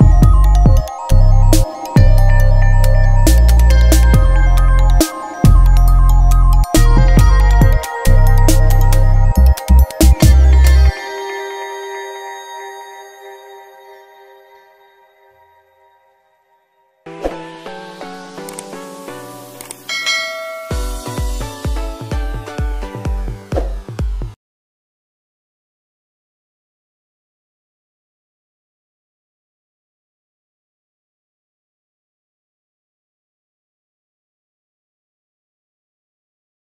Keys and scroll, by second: 0.0 Left, 0.3 Down, 1.5 Return, 2.9 r, 3.9 Return, 7.7 BackSpace, 8.0 0, 8.2 Return, 15.8 Return, 16.1 Up, 17.1 Down, 21.3 Return, 24.1 v, 24.3 Down, 25.6 ctrl+-, 26.4 ctrl+=, 27.1 ctrl+-, 27.5 ctrl+=, 28.3 ctrl+-, 28.7 ctrl+=, 29.5 F9, 31.1 ctrl+shift+n, 31.6 Return, 32.7 b, 33.5 d.